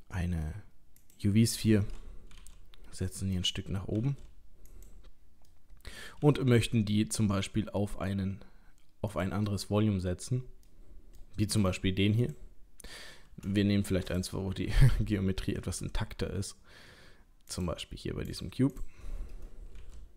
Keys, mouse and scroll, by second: 2.3 g, 4.0 g, 5.5 middle click, 6.2 g, 9.5 middle click, 10.3-10.7 scroll up 1, 10.7 middle click, 11.6 click, 12.2 click, 13.2 scroll down 1, 13.6 middle click, 14.0 click, 14.5 Delete, 15.6 shift+a, 18.2 click, 18.7 click, 19.8 g.